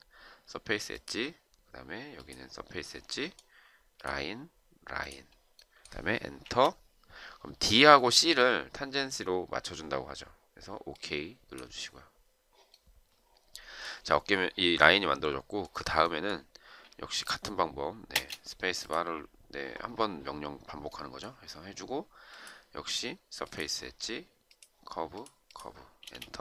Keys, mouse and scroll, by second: 6.5 Return, 18.1 space, 26.0 space.